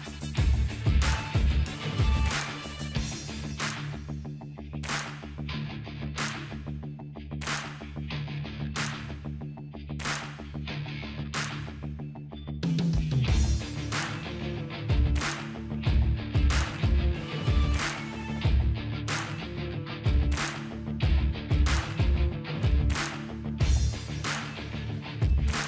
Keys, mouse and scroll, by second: 1.2-2.1 drag, 4.4 typing, 7.0 click, 12.4 click, 12.5 typing, 16.8 ctrl+c, 19.1 click, 22.4 click, 24.5 ctrl+v.